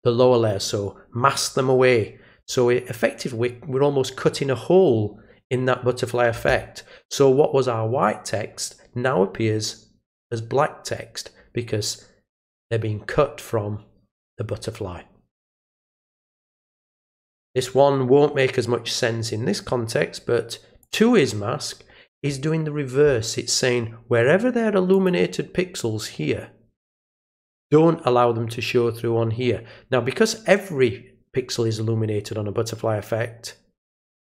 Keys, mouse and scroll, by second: 12.5 click, 15.6 click, 17.1 click, 20.8 click, 24.9 click.